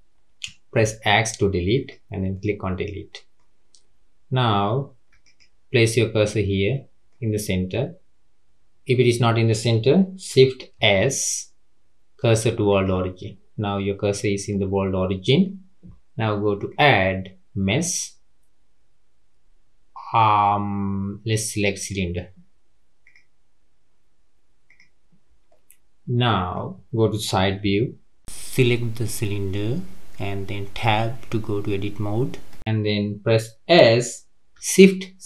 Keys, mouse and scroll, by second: 0.7 x, 2.2 scroll up 1, 2.3-5.3 middle drag, 5.3 shift+right click, 6.2-9.3 middle drag, 10.7 shift+s, 14.5-16.6 middle drag, 16.6-19.8 drag, 24.6 click, 25.5-27.6 middle drag, 27.6 KP_3, 28.2 click, 29.4 click, 32.3 Tab, 33.7 s.